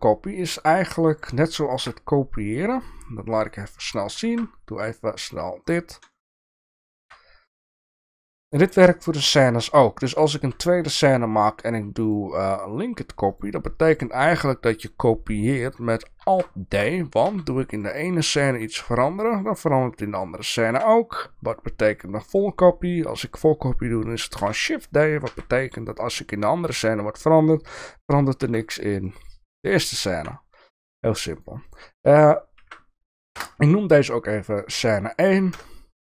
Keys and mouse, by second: 1.2 click, 1.8 KP_7, 3.4 click, 4.2 shift+a, 6.1 shift+middle drag, 7.0 g, 7.9 shift+middle click, 8.2-8.5 middle drag, 9.0 shift+middle drag, 9.7-10.1 shift+middle drag, 10.7 middle click, 12.2 click, 13.3 click, 16.2 alt+d, 17.3 Tab, 18.8 g, 20.8 Tab, 22.3 click, 23.2 shift+middle drag, 24.4 shift+d, 25.3 Tab, 26.8 g, 28.4 Tab, 29.1 drag, 30.1 Delete, 31.4-34.0 drag, 35.5 KP_0.